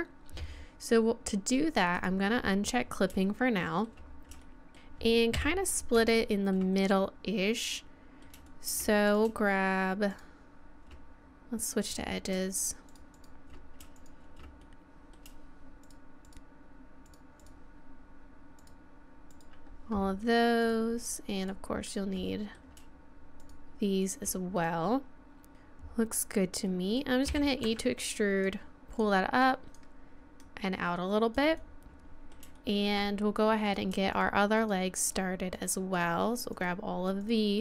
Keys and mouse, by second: 2.0 click, 3.3-5.2 middle drag, 5.3 KP_3, 6.1 middle click, 7.7 middle click, 9.1-11.8 middle drag, 11.9 middle click, 13.5-15.0 middle drag, 15.0 right click, 15.1-16.6 middle drag, 16.6 right click, 17.5-22.3 middle drag, 22.3 right click, 22.3 click, 22.4-26.8 middle drag, 27.3 e, 29.0-30.7 drag, 31.6 middle click, 32.6 middle click, 33.6 right click.